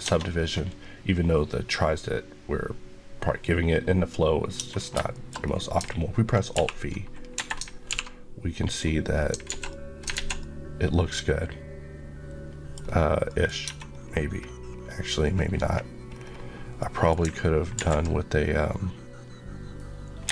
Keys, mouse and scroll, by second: 0.2-0.6 scroll up 1, 4.5 Tab, 4.6-5.4 scroll down 3, 5.0 shift+middle click, 6.4 alt+b, 7.2 Escape, 7.8 alt+v, 8.5 click, 9.0 scroll, 9.1 scroll down 1, 9.3 alt+z, 9.6 middle click, 10.0 alt+z, 10.3 alt+middle click, 12.7 scroll up 1, 13.1 middle click, 13.4-14.1 scroll up 2, 13.6 Tab, 16.6 middle click, 17.6 ctrl+r, 20.1 Escape.